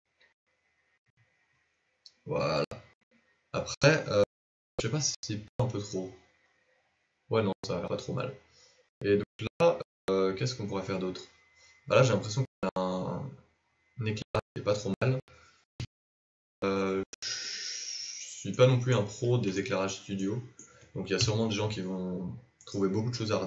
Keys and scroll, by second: 17.2 z, 21.2 KP_7.